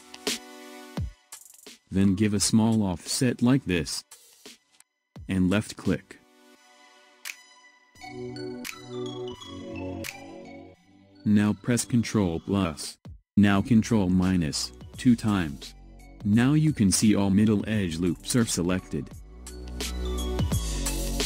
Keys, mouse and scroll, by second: 7.6-8.4 scroll down 2, 8.4-9.0 scroll up 1, 9.0-10.4 scroll up 1, 14.4 ctrl+KP_Subtract, 15.6 ctrl+KP_Subtract, 18.5-19.9 scroll down 1, 19.9-21.0 scroll up 2, 21.0 scroll down 1.